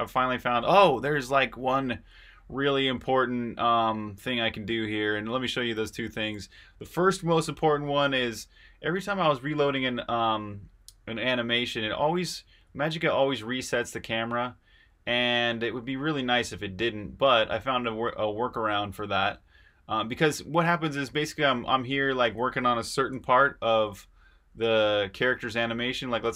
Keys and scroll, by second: 23.1 8, 25.0-26.2 typing.